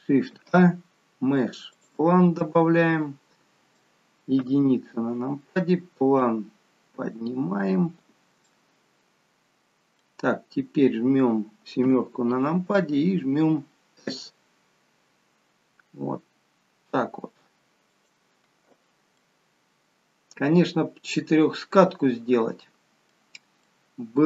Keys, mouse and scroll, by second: 0.3 shift+a, 2.3 middle click, 4.4 KP_1, 6.2 click, 8.5 middle click, 11.8 KP_7, 14.0 s, 19.2 middle click, 23.6 middle click.